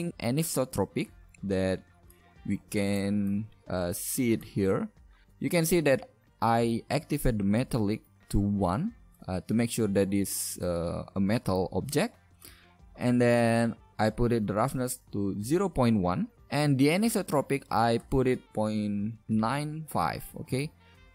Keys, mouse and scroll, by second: 2.9-4.4 right drag, 4.4-9.9 middle drag, 18.5-20.1 middle drag, 21.0 shift+z.